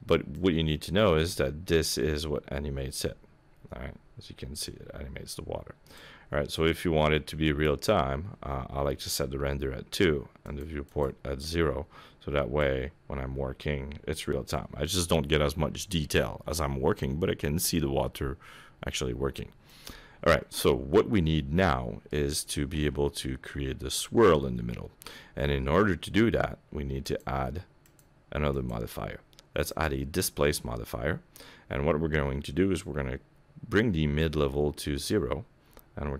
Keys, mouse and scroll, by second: 0.3 click, 10.4 click, 10.9 click, 12.6 click, 20.6 middle click, 22.3 shift+middle click, 24.7 middle click, 25.2 scroll up 1, 27.0 click, 27.8 click, 28.5 click, 34.2 click.